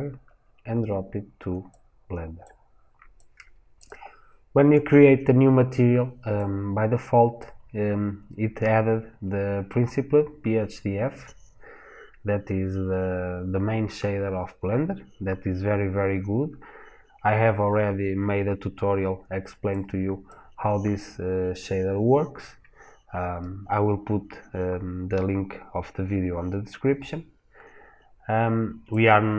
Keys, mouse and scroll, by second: 0.2 click, 3.6 click.